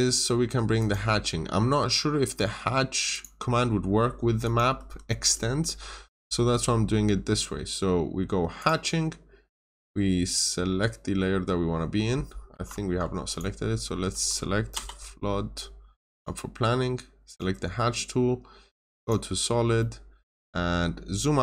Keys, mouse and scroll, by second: 0.7 click, 3.7 scroll up 1, 4.3 click, 4.7 Escape, 5.1 scroll down 1, 5.2 middle click, 5.6 scroll up 1, 8.5 click, 12.4 Escape, 12.8 Escape, 13.2 click, 14.6 typing, 16.0 click, 19.4 scroll down 1, 19.7 middle click, 20.6-21.4 scroll down 1.